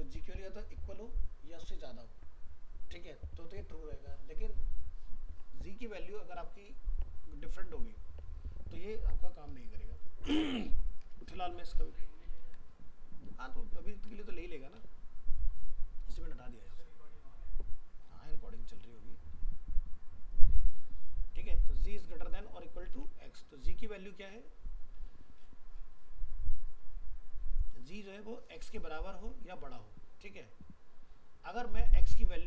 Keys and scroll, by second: 12.1 ctrl+s, 14.0 alt+Tab, 22.9 alt+Tab.